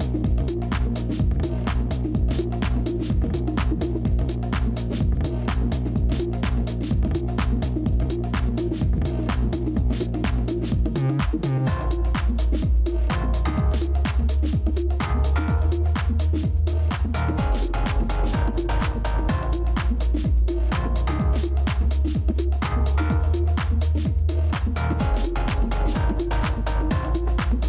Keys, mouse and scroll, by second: 4.0 ctrl+-, 4.1 ctrl+-, 4.6 space, 8.7 ctrl+-, 8.9 ctrl+-, 12.4 ctrl+z, 13.4-15.0 typing, 16.6 |, 21.5 ctrl++, 21.6 ctrl++, 21.8 ctrl++, 22.3 space.